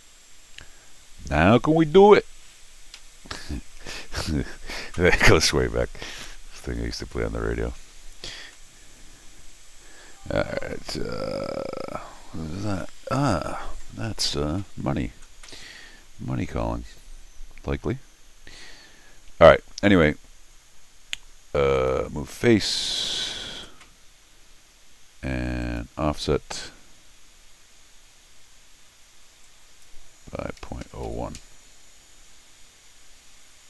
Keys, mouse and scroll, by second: 1.1-1.7 scroll up 4, 3.0 Escape, 6.6 click, 8.5 middle click, 21.7 click, 25.6 click, 29.4 click.